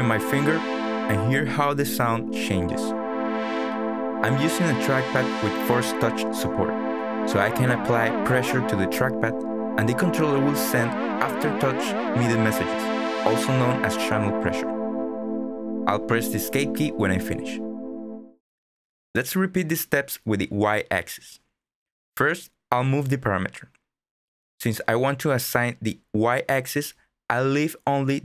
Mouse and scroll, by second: 14.9 click.